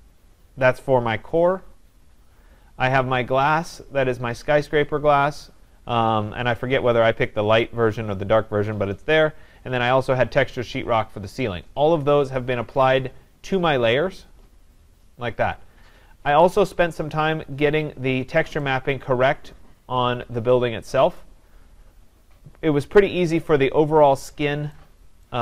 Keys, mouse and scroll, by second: 3.0-8.2 drag, 9.9-13.3 drag, 16.4 click, 17.5 scroll, 21.2 right click, 21.6 scroll, 23.0 click, 25.3 right click, 25.3-25.4 scroll.